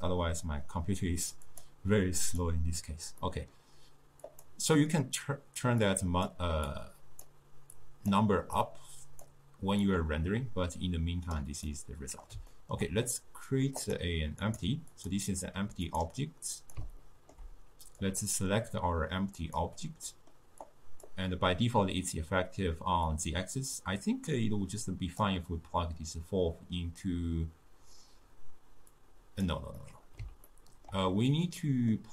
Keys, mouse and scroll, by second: 1.6 drag, 2.3 click, 3.3-4.3 middle drag, 4.3 click, 5.9 click, 6.7 drag, 7.8 click, 8.6 click, 9.9 drag, 11.8-13.9 middle drag, 13.9 click, 14.5 click, 15.0 click, 15.9 click, 16.6 click, 17.1-18.1 ctrl+middle drag, 18.1 click, 20.1-20.7 middle drag, 20.7-26.3 drag, 29.0 drag, 29.9-32.1 middle drag.